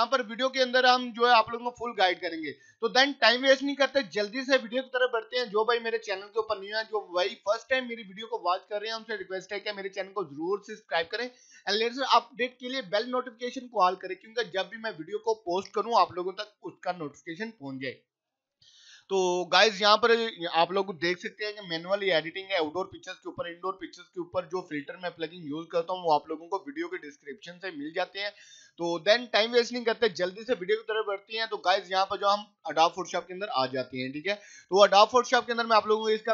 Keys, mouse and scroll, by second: 0.5 click, 10.6 click, 13.0 click, 19.0-30.0 drag, 32.7 click.